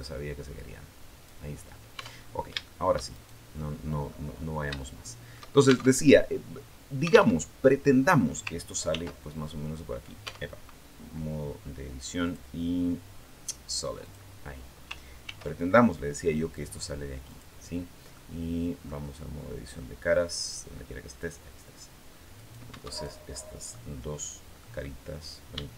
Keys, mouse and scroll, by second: 1.7 Tab, 2.0 scroll down 2, 2.4 shift+middle click, 2.9 shift+right click, 3.5 shift+middle click, 4.1-4.4 scroll up 1, 4.6 shift+middle click, 5.0 shift+scroll up 1, 5.7 alt+shift+Tab, 7.2 alt+Tab, 8.7 ctrl+r, 10.0 Tab, 12.0 click, 13.8 click, 15.0 ctrl+r, 16.4 click, 17.0 click, 17.9 middle click, 21.0 click, 22.2 right click, 22.7 shift+right click, 23.1 shift+middle click, 23.6-24.0 scroll down 2, 24.0-25.1 middle drag.